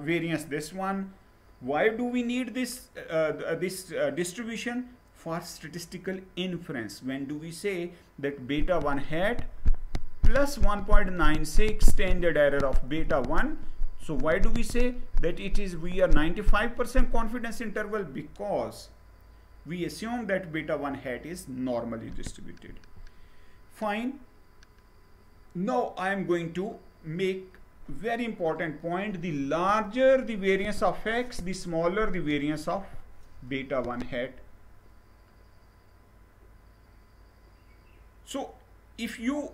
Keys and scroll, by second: 22.3 Down.